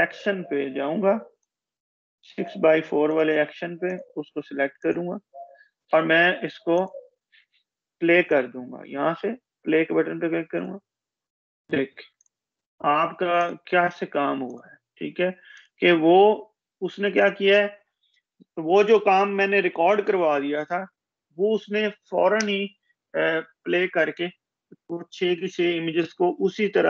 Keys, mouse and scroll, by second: 4.5-5.1 shift+scroll down 1, 5.1-6.8 shift+drag, 17.6 ctrl+shift+z, 17.8 shift+click.